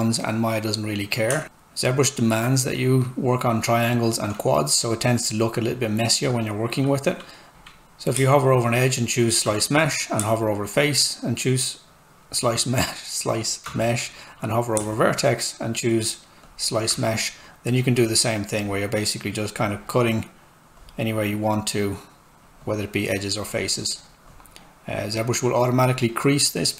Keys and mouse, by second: 1.3 Return, 1.4 space, 7.5 z, 8.1 space, 12.1 click, 12.2 space, 17.8 click.